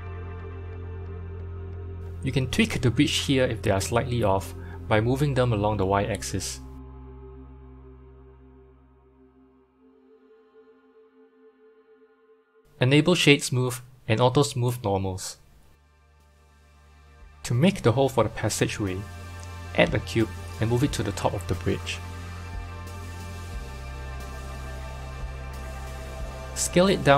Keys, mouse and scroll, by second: 0.0 1, 0.4 click, 1.0-2.5 scroll up 2, 2.5 scroll up 1, 2.7 click, 3.5 click, 4.4 g, 8.3 Tab, 8.9-11.1 middle drag, 11.1 click, 12.6 right click, 14.1 q, 14.5 q, 15.7-16.5 scroll down 1, 16.5 middle click, 17.3 n, 18.2 click, 19.1 shift+a, 20.5 shift+a, 21.8 KP_1, 21.9 KP_1, 23.1 g, 24.4-25.1 scroll up 7, 25.1-26.3 shift+middle drag, 26.3 s.